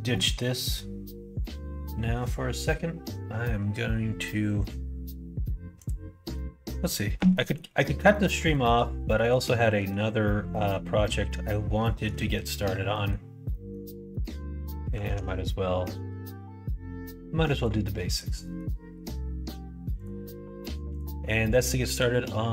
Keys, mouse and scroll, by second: 6.3 middle click, 7.3 middle click, 8.0 middle click, 8.4 shift+middle click, 9.1 middle click, 9.6 shift+middle click, 10.4 middle click, 11.2 middle click, 12.1 middle click, 12.9 middle click, 13.5 middle click, 14.1 middle click, 15.0 ctrl+s, 18.4 middle click, 19.9-22.5 drag.